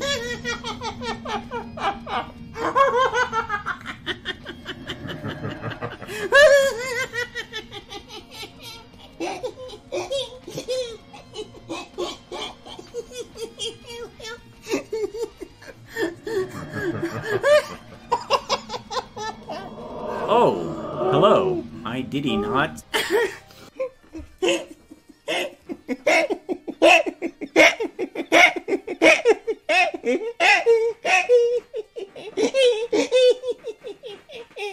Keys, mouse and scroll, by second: 22.8 space.